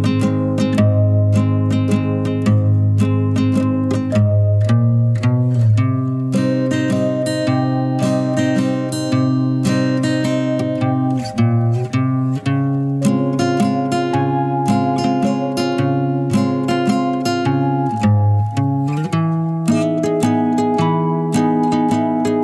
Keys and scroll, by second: 1.1-1.5 typing.